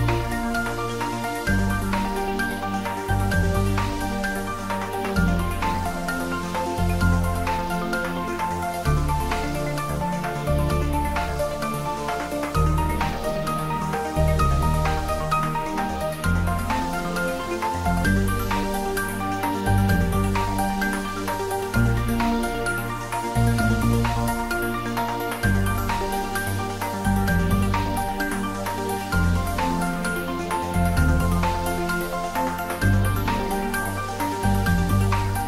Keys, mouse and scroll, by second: 1.1 right click, 1.6 click, 3.1 scroll up 1, 5.7-7.6 middle drag, 9.1-10.4 scroll down 1, 12.7-13.4 middle drag, 16.5-17.0 scroll down 1, 18.6-20.5 scroll down 1, 23.6 scroll down 1, 25.7 click, 27.0-28.1 scroll up 1, 29.5 click, 32.1-32.7 scroll down 1, 32.7-33.3 middle click, 33.5-34.3 scroll up 1, 34.3-35.2 middle drag.